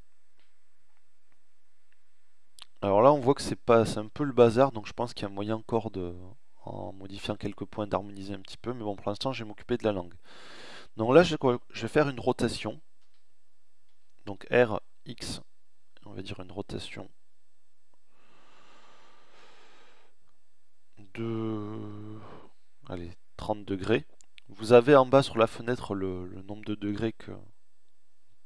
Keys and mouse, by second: 11.9 r.